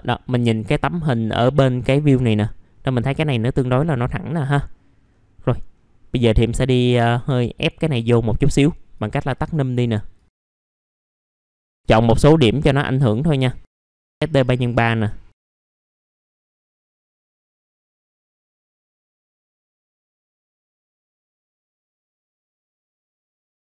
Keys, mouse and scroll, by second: 0.0 middle click, 0.4 scroll down 1, 0.7 alt+middle click, 1.3-2.3 scroll up 1, 2.3 middle click, 5.0-5.4 scroll down 1, 5.4 middle click, 5.6-6.1 scroll down 1, 6.1 middle click, 6.5 scroll up 1, 7.0 alt+middle click, 9.0 click, 10.6 1, 11.4 click, 11.6-12.0 scroll up 1, 12.2 alt+click, 12.9 alt+middle click, 14.1 click, 14.6 alt+middle click, 15.3 click, 15.8 click, 16.4 alt+middle click, 16.6 scroll down 1, 16.7 alt+middle click, 17.1 alt+middle click, 17.6 scroll down 1, 17.8 scroll up 1, 18.1 alt+middle click, 18.8 alt+middle click, 19.1 scroll down 1, 19.2 alt+middle click, 19.7 scroll down 1, 20.2 scroll up 1, 20.9 click, 21.2 ctrl+click, 21.4 alt+middle click, 21.6 scroll up 1, 21.8 click, 22.8 right click, 23.0 click, 23.3 middle click, 23.3 scroll down 1.